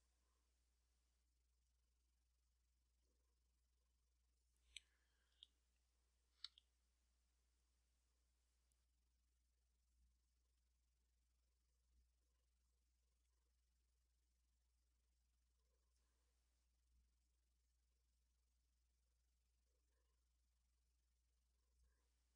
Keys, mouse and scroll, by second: 0.8 click, 1.6-4.5 drag, 5.3 f, 5.7 click, 6.9 click, 7.4 click, 7.9 click, 8.4 click, 9.1 click, 9.8 click, 11.1 click, 11.6-13.2 drag, 13.7 click, 14.6-15.8 drag, 16.6-19.0 drag, 19.1 click, 20.4-21.8 drag.